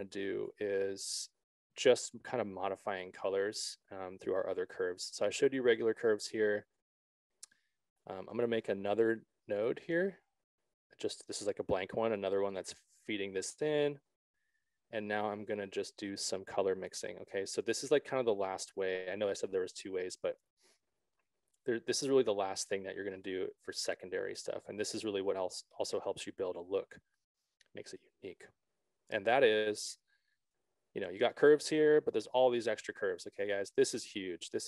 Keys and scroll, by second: 9.5 alt+s.